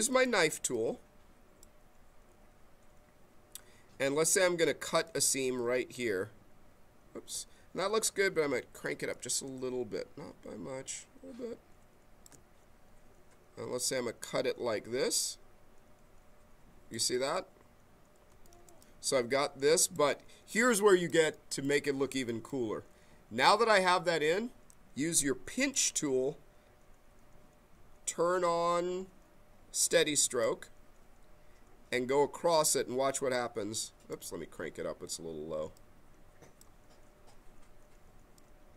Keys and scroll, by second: 7.6 ctrl+z, 8.9 m.